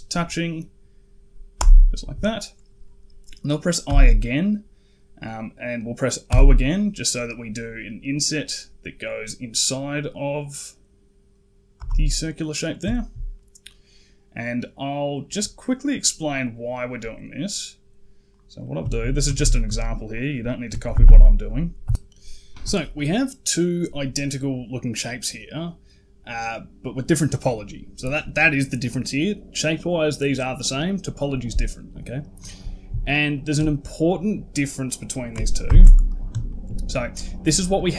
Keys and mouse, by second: 3.7 i, 12.0 middle click, 12.8 shift+middle click, 13.2 middle click, 15.5 middle click, 18.2 click, 18.5 middle click, 18.7 shift+middle click, 19.1 a, 19.2 a, 19.5 c, 20.8 ctrl+KP_Add, 20.9 ctrl+KP_Add, 21.7 ctrl+KP_Add, 33.2 shift+middle drag, 35.5 ctrl+KP_7, 36.3 shift+middle drag, 36.9 click.